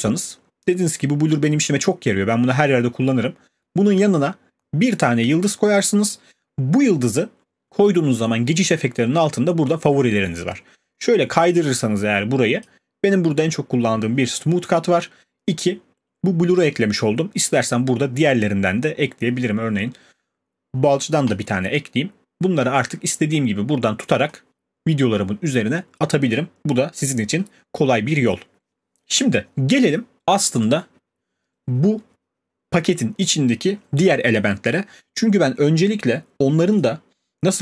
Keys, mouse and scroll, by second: 0.3 click, 12.6 click, 17.6 click, 21.3 click, 30.6 click, 36.8 click.